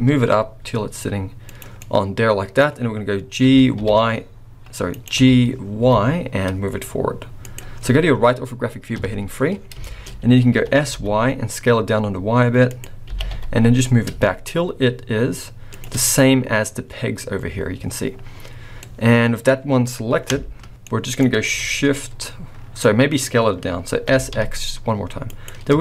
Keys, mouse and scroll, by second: 1.7 middle click, 3.4 f, 3.7 y, 4.9 right click, 5.2 g, 8.9 KP_3, 9.5 scroll down 4, 9.8 shift+middle click, 10.1-10.8 scroll up 4, 10.5 s, 13.0 g, 16.2-16.8 scroll up 1, 16.8 scroll up 1, 18.2-18.7 scroll down 5, 18.8 middle click, 20.8 middle click, 22.8 middle click, 23.2-24.1 scroll up 2, 24.1 s.